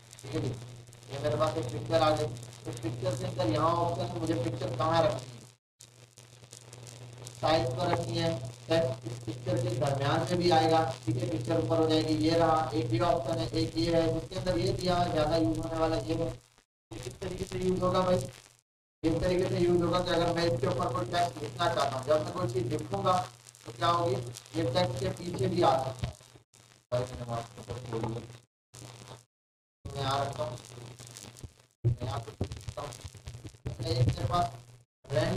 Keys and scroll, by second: 31.9 g, 32.2 j, 33.5 BackSpace.